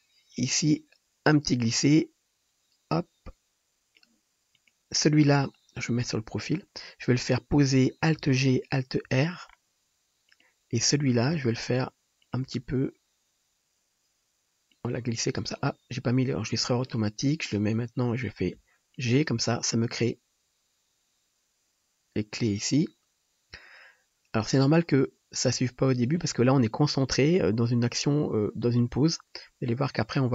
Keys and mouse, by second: 4.8-9.3 drag, 5.9 KP_3, 8.5 alt+g, 9.0 alt+r, 9.6 drag, 10.3 click, 10.3 middle click, 10.3 right click, 11.3 g, 12.6 r, 16.4-16.9 drag, 17.4 shift+click, 18.5 g, 20.0-30.3 drag, 20.0-30.3 middle drag, 20.0-30.3 right drag.